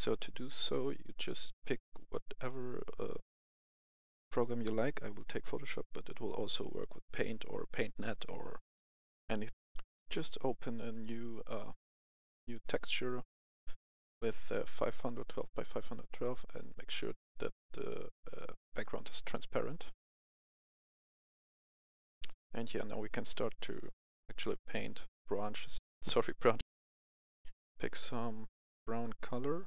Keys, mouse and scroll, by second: 1.4 click, 9.6 F10, 10.4 F10, 11.6 click, 25.8 F11, 26.0 F10, 26.6 F11, 27.2 F10, 27.8-29.6 drag.